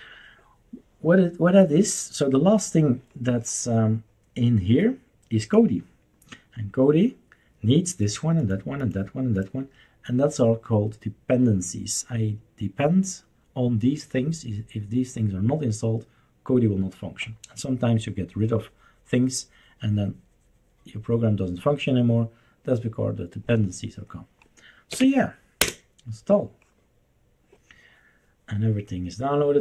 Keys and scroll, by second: 24.9 typing, 25.6 Return.